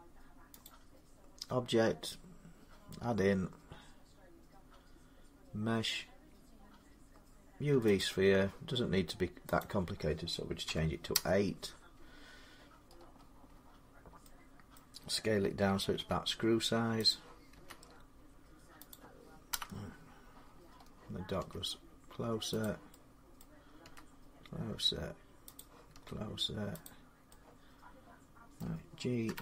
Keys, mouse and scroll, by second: 0.5 click, 1.8 middle click, 4.5-5.6 drag, 7.8-8.9 drag, 10.5 typing, 10.9 Return, 11.7 8, 12.7-14.0 scroll, 14.6-17.9 middle click, 14.6 scroll up 10, 15.8 s, 16.9 click, 17.4 s, 18.7 click, 19.3 ., 20.2 scroll down 1, 20.3-20.6 middle click, 20.4 middle click, 20.6 middle click, 21.2 s, 22.4 click, 22.7 ., 23.2 middle click, 23.7 s, 25.4 click, 25.8 s, 26.7 click, 28.4 middle click, 29.1-29.4 typing.